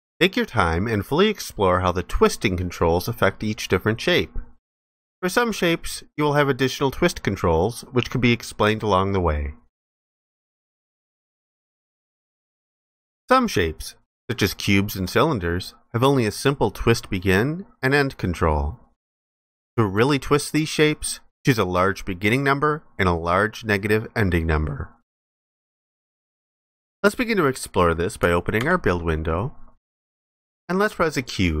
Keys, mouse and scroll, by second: 28.6 ctrl+b.